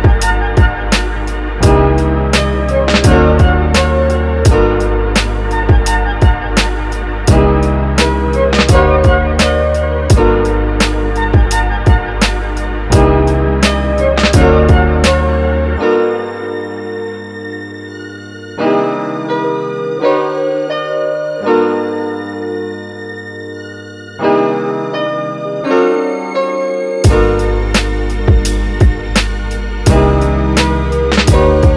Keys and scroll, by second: 21.6-23.5 typing.